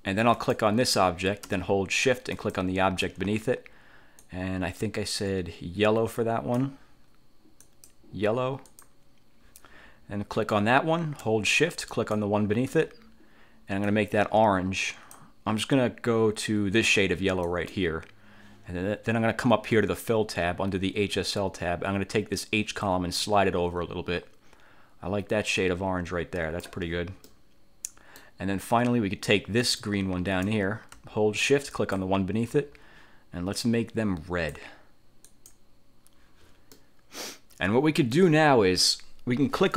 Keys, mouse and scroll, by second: 0.5 click, 2.5 shift+click, 4.3-6.9 drag, 7.8 click, 8.9 click, 10.5 click, 12.1 shift+click, 14.0-15.5 drag, 17.6 click, 22.9-26.9 drag, 27.4-28.5 middle drag, 29.7 click, 31.9 shift+click, 33.7-34.8 drag, 35.4 click, 36.9-38.5 middle drag.